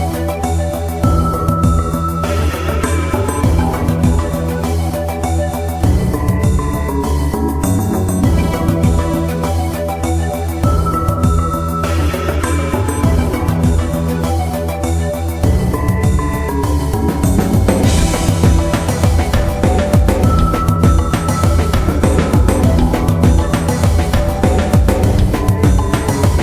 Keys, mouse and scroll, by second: 1.3 middle click, 1.5-1.8 scroll down 1, 1.8 middle click, 2.1-2.5 scroll up 1, 2.5 scroll down 1, 2.7 middle click, 4.7 click, 5.9-7.0 scroll down 1, 7.0 click, 9.5 middle click, 9.7 scroll down 1, 9.9 middle click, 11.2 KP_Decimal, 11.8-14.5 middle drag, 14.6 scroll down 1, 14.8 middle click, 15.3 Tab, 15.6 middle click, 16.6 scroll up 1, 16.9 middle click, 18.2 click, 19.4 right click, 19.7 middle click, 20.0 scroll up 1, 20.7 right click, 21.1 shift+right click, 22.0 shift+right click, 22.5 shift+right click, 23.0 shift+right click, 23.3 middle click, 24.3 shift+right click, 24.7 shift+right click.